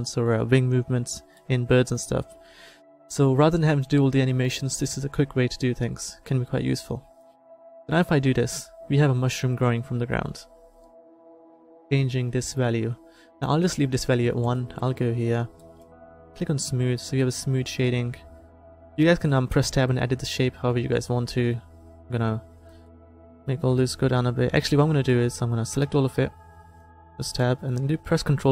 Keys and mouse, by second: 7.3-9.2 drag, 14.6 click, 14.8-19.2 middle drag, 19.7 Tab, 23.8-25.1 middle drag, 25.1-26.2 drag, 26.2 a, 26.6 a, 26.9 Tab, 28.4 ctrl+1.